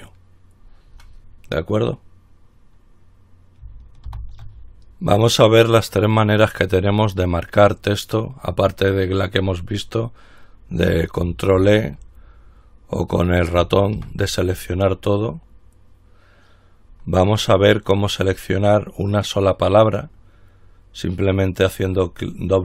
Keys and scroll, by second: 4.3 ctrl+r, 11.8 ctrl+e, 14.2 ctrl+e.